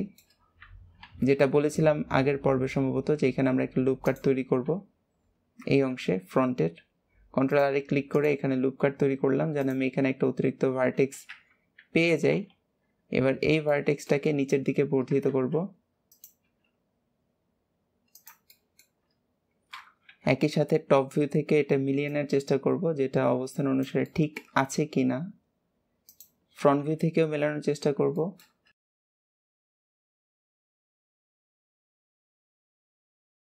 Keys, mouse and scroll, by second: 0.2 scroll up 1, 5.3-5.8 scroll down 2, 5.8 ctrl+r, 9.5 click, 10.1-11.2 scroll up 1, 11.2 KP_1, 13.3-13.6 scroll up 2, 13.6-15.2 shift+middle drag, 15.2 alt+z, 18.4-20.0 shift+middle drag, 20.0 KP_7, 21.0-22.0 scroll up 2, 22.0 click, 24.0 shift+middle click, 24.6 e, 26.7 KP_1, 27.7 scroll down 1, 27.8 scroll up 1, 27.9 scroll down 1, 28.0 shift+middle click, 28.7 alt+z, 29.3 click, 30.5 ctrl+z, 30.8 click, 31.4 shift+middle click, 31.6 e, 32.6 KP_3, 33.2 click.